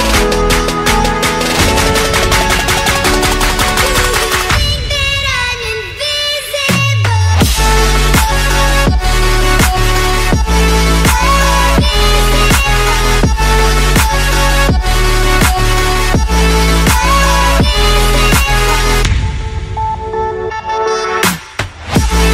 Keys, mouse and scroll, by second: 0.3 click, 0.5 middle click, 1.2 click, 2.0 click, 4.0 click, 5.0 click, 5.5 click, 7.7 click, 10.0 click, 11.0 click, 14.3 click, 15.5 click, 16.3 click, 17.1 click, 19.0 middle click, 20.8 click, 21.0 click.